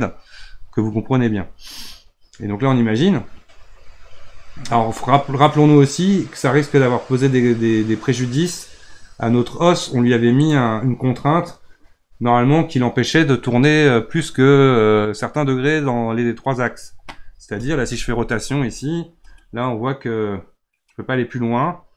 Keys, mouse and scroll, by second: 10.4 click, 19.1 r.